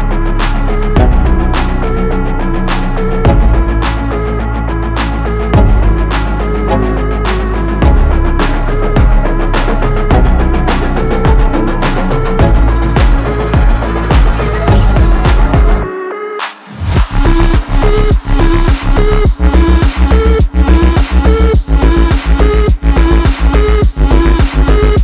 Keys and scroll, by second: 1.2 space, 16.4 ctrl+j.